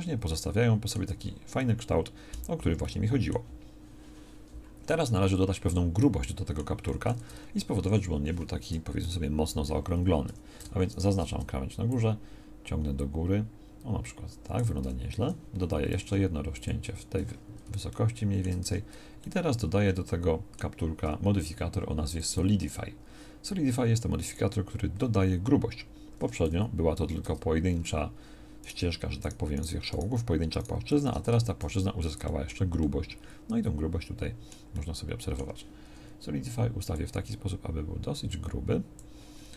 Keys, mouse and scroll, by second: 1.1 Tab, 6.1 click, 7.2 Tab, 8.1 a, 9.1 KP_1, 10.3 a, 16.0 ctrl+r, 18.7 Tab, 26.5 z, 27.3 Tab, 31.3 Tab, 31.7 z.